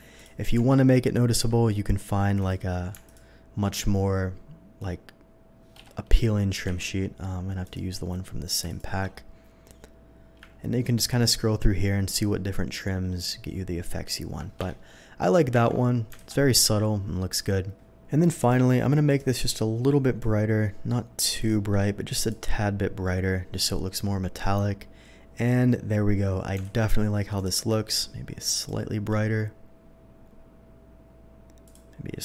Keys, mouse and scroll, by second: 0.1 click, 0.6 Tab, 1.4 v, 2.4 click, 3.0 alt+click, 5.7 Escape, 6.7 v, 7.6 click, 8.7 alt+click, 14.6 Escape, 15.5 Tab, 16.2 alt+a, 18.4 click, 19.1 click, 20.2-21.4 drag, 22.2 click, 26.6 alt+a, 27.4 click, 28.4 click, 31.6 click.